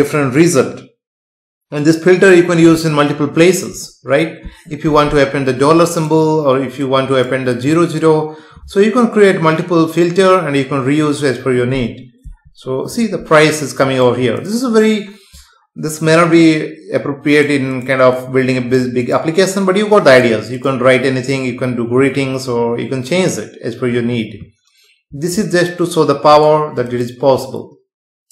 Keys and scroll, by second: 12.3 F5.